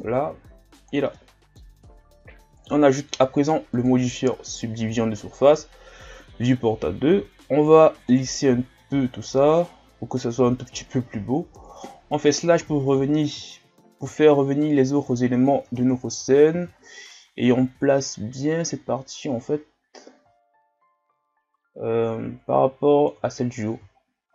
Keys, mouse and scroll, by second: 0.3 i, 1.1 middle click, 1.7 Tab, 2.5-6.1 drag, 6.1-7.1 scroll up 1, 7.1 w, 8.9-11.6 middle drag, 11.6 KP_Divide, 12.6 KP_1, 13.4 scroll up 4, 14.2-14.7 shift+scroll up 3, 15.6 Tab, 16.2 a, 16.5 a, 18.0-24.0 drag, 24.0-24.3 shift+scroll up 2.